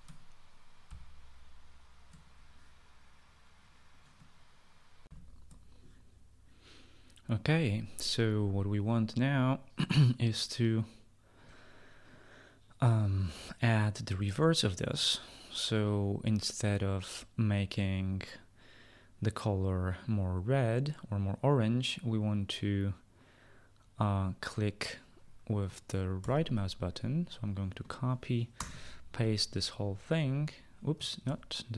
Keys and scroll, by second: 5.6 shift+F9, 5.6 shift+F9, 26.7 ctrl+c, 29.1 Return, 29.3 ctrl+v.